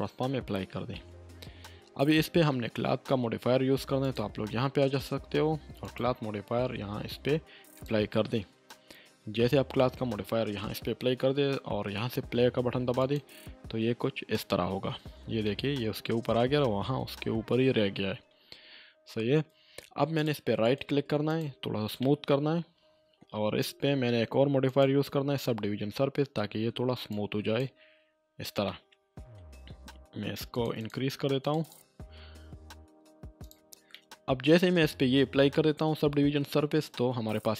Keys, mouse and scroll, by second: 4.0 click, 13.0 click, 15.5-16.0 middle click, 16.5-18.4 scroll up 1, 20.2 click, 20.6 right click, 21.3 click, 22.0-23.2 middle drag, 24.6 click, 27.1-27.7 drag, 28.6-29.6 middle drag, 30.5 click, 33.9-34.5 middle drag.